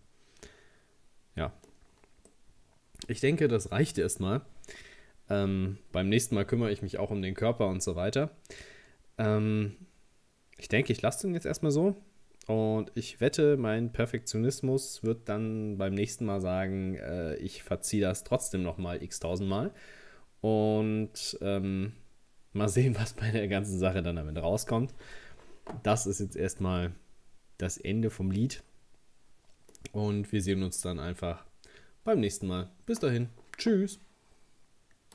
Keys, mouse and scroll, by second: 1.9-2.3 scroll down 2, 2.3-5.3 middle drag, 26.6-29.7 middle drag.